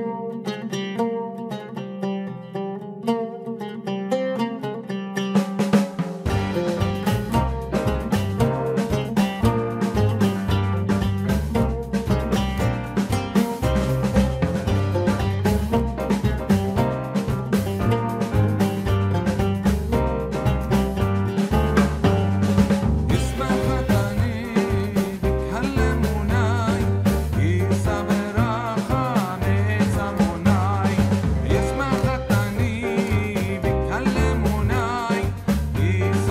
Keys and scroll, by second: 10.6 ctrl+t, 19.8 Return, 25.0 ctrl+shift+n, 25.4 Return.